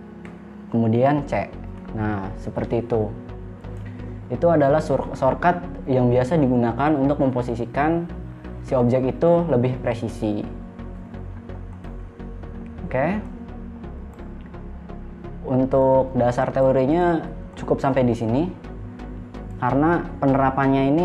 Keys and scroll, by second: 0.0 e, 1.9 c.